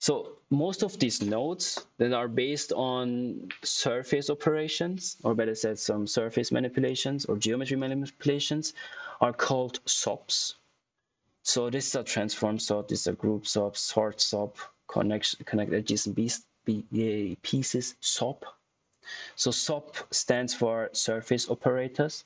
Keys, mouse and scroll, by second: 12.2 click.